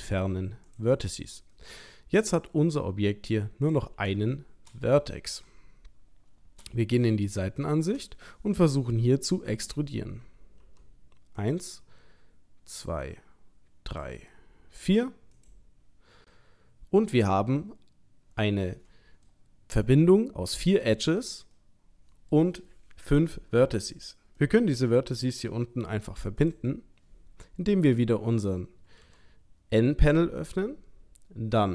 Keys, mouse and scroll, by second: 1.6 middle click, 3.7 click, 4.3 shift+middle click, 5.3 KP_3, 6.2-6.7 scroll up 2, 6.8 scroll down 1, 7.4 shift+middle click, 10.6 e, 11.8 e, 14.1 e, 16.3 middle click, 21.5 middle click, 24.4 middle click, 26.4 click, 29.0 n.